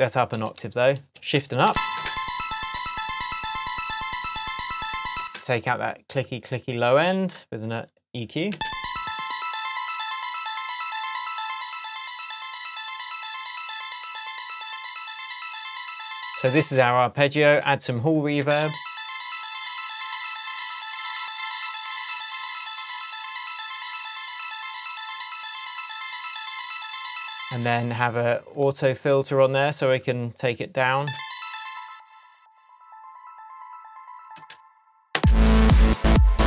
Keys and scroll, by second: 0.6 shift+super+a, 1.6 shift+Up, 1.9 shift+space, 2.8 shift+Tab, 5.1 space, 8.5 space, 16.5 space, 18.4 space, 27.4 space, 31.0 space, 34.3 space.